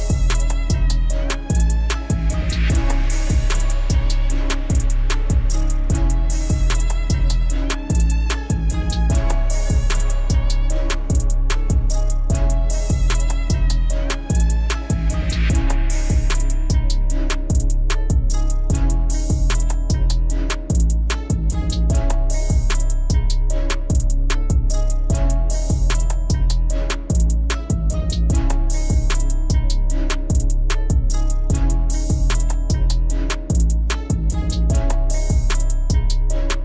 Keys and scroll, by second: 8.4 alt+w, 10.7 alt+x, 14.8 F4, 31.0 F4.